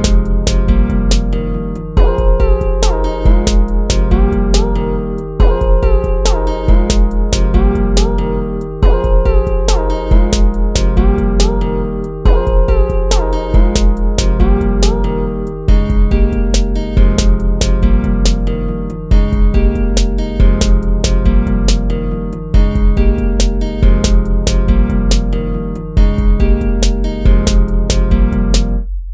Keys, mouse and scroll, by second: 1.3 ctrl+-, 2.0 ctrl++, 2.4 ctrl++, 5.3 ctrl+z, 5.7 ctrl+z, 7.0 ctrl+-, 7.6 ctrl++, 7.8 ctrl++, 8.3 ctrl+z, 9.1 ctrl+-, 9.6 ctrl+z, 10.3 ctrl+z, 12.1 ctrl+z, 14.5 ctrl++, 19.6 ctrl+-, 20.5 ctrl++, 21.0 ctrl+z, 22.0 ctrl++, 22.4 ctrl++, 22.6 ctrl++, 26.4 ctrl+-, 26.8 ctrl++.